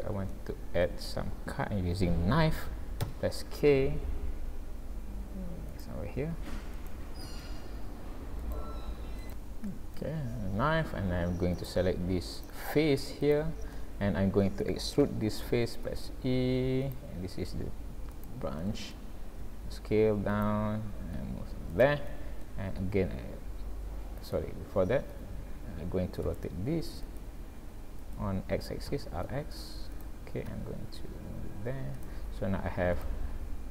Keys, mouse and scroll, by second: 0.3 shift+middle click, 3.0 k, 11.6 click, 12.4 click, 13.4 click, 13.7 middle click, 15.1 middle click, 15.9 e, 17.2 s, 18.6 middle click, 19.4 s, 21.2 g, 22.1 middle click, 22.8 e, 25.3 ctrl+z, 26.3 r, 28.9 r, 30.5 e, 32.2 s, 33.3-33.7 scroll down 3.